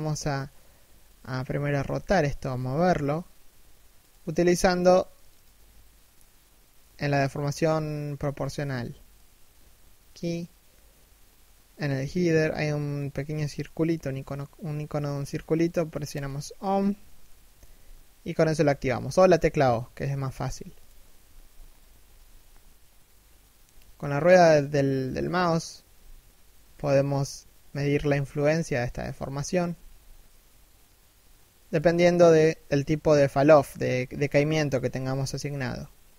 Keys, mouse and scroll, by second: 1.2 g, 7.0 g, 17.1 g.